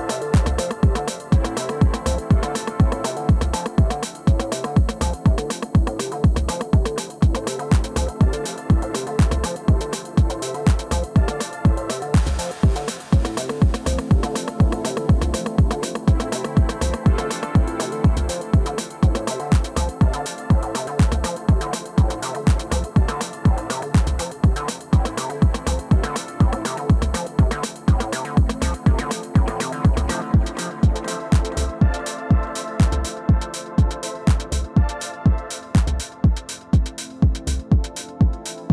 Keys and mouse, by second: 0.1-1.8 middle drag, 1.1 KP_3, 1.8-8.8 drag, 5.2-7.1 middle drag, 9.1 click, 9.3 middle click, 11.1-13.1 middle drag, 13.1-18.1 drag, 15.3 i, 19.2-20.8 drag, 19.2 i, 21.1 middle click, 21.8-24.0 drag, 24.0 middle click, 24.6 middle click, 27.0 click, 27.9 f, 28.5-29.9 drag, 29.9 middle click, 30.1 g, 31.6-37.4 drag, 37.4 middle click, 37.9-38.7 drag.